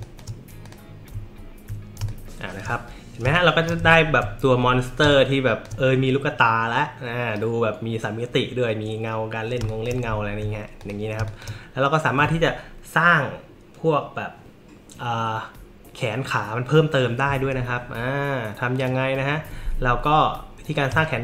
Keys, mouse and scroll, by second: 0.0 click, 0.1 middle click, 0.6 click, 0.7 middle click, 1.3-1.6 alt+scroll up 1, 2.0 space, 2.0 click, 3.2 space, 3.3 click, 4.0 alt+scroll up 1, 5.0 space, 5.1 click, 9.6 space, 9.7 click, 10.8 click, 11.2 space, 11.3 click, 18.8 click, 20.9 space, 21.0 click.